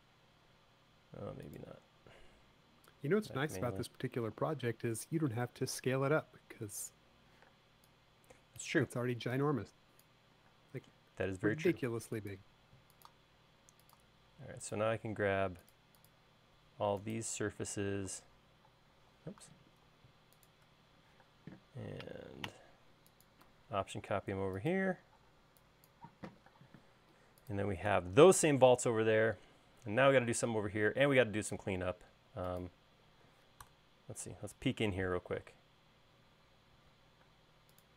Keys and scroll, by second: 8.1 p, 11.2 space, 18.5 m, 20.1 space, 21.9 m, 25.9 e, 27.3 space, 28.6 BackSpace, 34.3 BackSpace, 36.0 e.